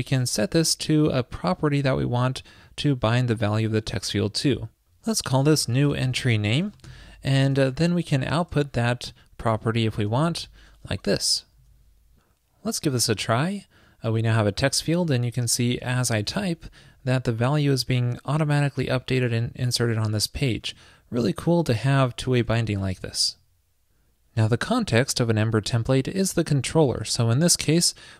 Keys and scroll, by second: 7.5 super+Return, 11.6 super+s, 22.4 alt+super+BackSpace.